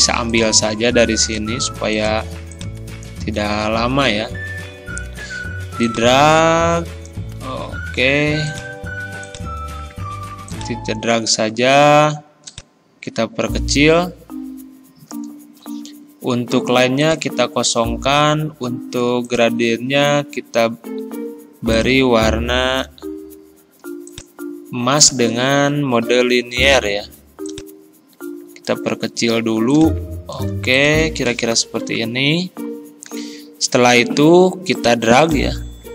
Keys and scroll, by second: 4.9 ctrl+z, 7.9 ctrl+z.